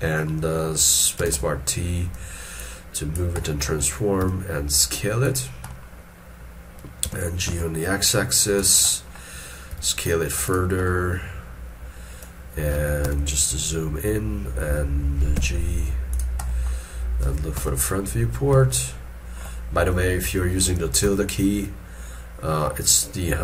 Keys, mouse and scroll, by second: 1.2 space, 1.2 t, 3.4 middle click, 4.2 s, 5.7 middle click, 7.0 g, 8.9 middle click, 9.7 s, 10.8 middle click, 11.4-12.4 scroll up 1, 13.0 -, 13.6 scroll down 1, 15.3 g, 16.5 middle click, 16.6 scroll down 1, 17.5 scroll, 18.7 shift+middle click.